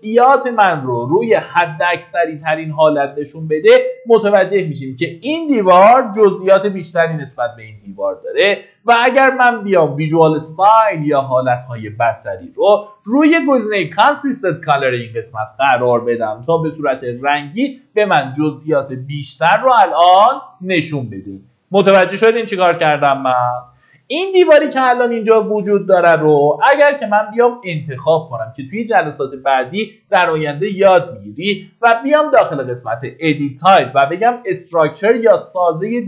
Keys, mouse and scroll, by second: 4.7-5.1 scroll up 1, 10.2 click, 17.4 middle click, 18.9 scroll up 1, 21.8-23.4 scroll down 1, 26.5-36.0 drag.